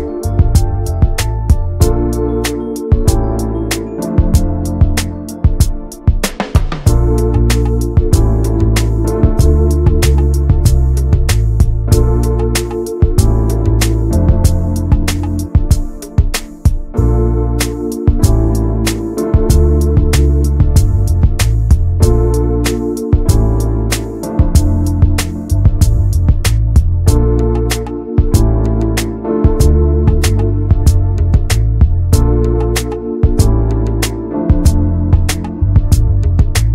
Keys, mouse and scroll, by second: 0.3 middle click, 0.8 alt+s, 3.3 click, 3.7 scroll down 2, 3.9-5.7 middle drag, 5.7 Tab, 5.8 click, 5.9 scroll down 2, 6.1 middle click, 6.5 ctrl+s, 6.8 shift+middle click, 6.9 scroll up 1, 7.1 middle click, 7.3 Tab, 7.5 scroll up 1, 7.8 shift+middle click, 8.3 ctrl+s, 8.9-10.0 middle drag, 10.0 scroll up 1, 10.2 shift+middle click, 10.8 alt+z, 11.4 middle click, 12.7 scroll down 4, 12.9 alt+z, 13.4 alt+z, 13.6 scroll up 1, 14.5 click, 15.1 l, 15.4 scroll down 1, 16.5-17.8 scroll up 3, 16.8 shift+middle click, 17.8 click, 18.5 click, 19.0 l, 19.3-19.9 scroll down 1, 19.9 click, 21.2 l, 21.7 click, 22.0 l, 22.4-23.7 middle drag, 23.7 alt+h, 24.1-25.9 middle drag, 25.9 alt+h, 26.9 shift+h, 27.2 middle click, 27.6 alt+z, 27.9 click, 28.3 middle click, 28.8 scroll down 1, 29.1 middle click, 29.6 shift+click, 30.1 x, 31.2 Tab, 31.4 middle click, 31.7 click, 32.2 ctrl+a, 32.6 Tab, 32.9 middle click, 33.4 click, 33.8 l, 34.6 alt+h, 35.0 middle click, 35.8 click.